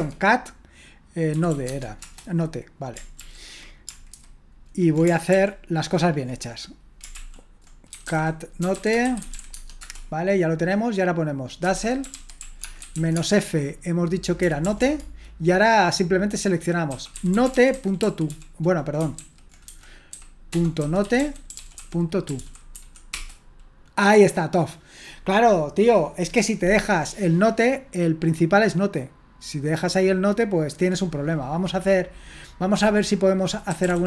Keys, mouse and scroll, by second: 0.0-2.0 typing, 3.2 ctrl+p, 4.1 alt+b, 5.4 ctrl+o, 7.2 ctrl+l, 7.7-9.8 typing, 11.4-15.2 typing, 16.9-23.2 typing, 19.2 ctrl+w, 28.5-33.7 drag, 33.5-34.0 typing.